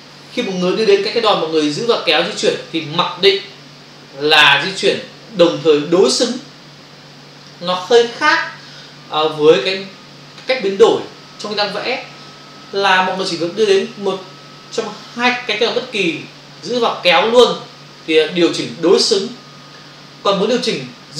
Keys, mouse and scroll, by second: 1.8 click, 18.1 click.